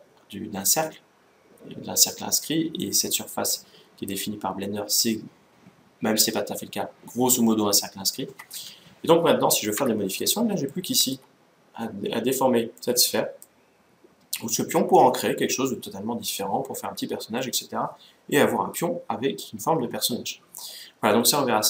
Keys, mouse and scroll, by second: 8.0-9.8 middle drag, 9.7 Tab, 10.1-12.4 middle drag, 12.6-14.3 middle drag.